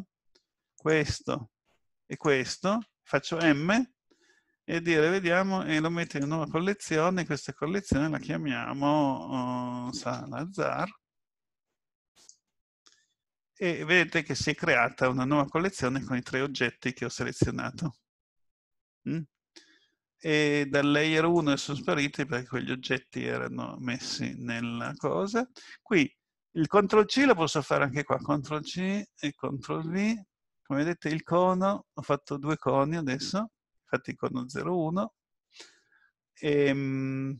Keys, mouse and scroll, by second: 0.8 shift+click, 1.6 shift+click, 3.4 m, 21.1 click, 24.8 click, 27.1 ctrl+c, 28.4 Up, 28.7 Up, 29.8 ctrl+v, 32.2 click.